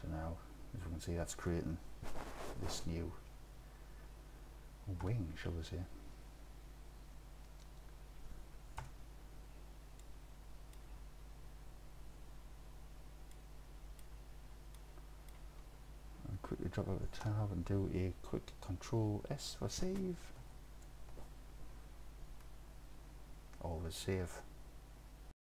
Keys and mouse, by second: 5.1 KP_7, 8.8 KP_3, 10.1 middle drag, 10.3 middle drag, 10.4 middle click, 10.8 click, 13.4 middle click, 14.8 middle click, 17.3 Tab, 20.5 ctrl+s.